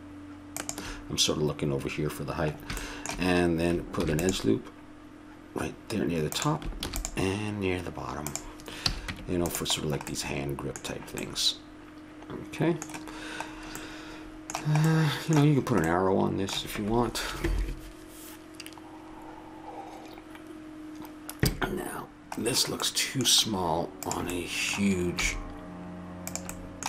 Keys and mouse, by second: 2.5-4.0 middle drag, 4.0 ctrl+r, 6.8 ctrl+r, 8.9 a, 9.1 Tab, 9.9 middle click, 10.3 middle click, 10.7-17.9 middle drag, 22.4-24.0 middle drag, 24.0-25.8 drag, 25.2 s.